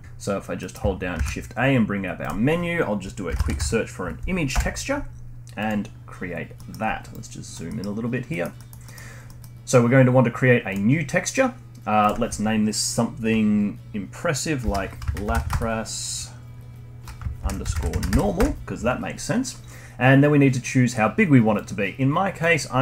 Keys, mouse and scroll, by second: 0.6 middle click, 1.1 shift+a, 6.0-6.6 scroll up 5, 6.6-7.1 middle drag, 7.1-7.7 drag, 7.7-8.0 middle drag, 8.0-8.3 scroll up 1, 8.3 middle click, 9.1 scroll up 1, 9.2-10.7 middle drag, 10.7-13.8 drag.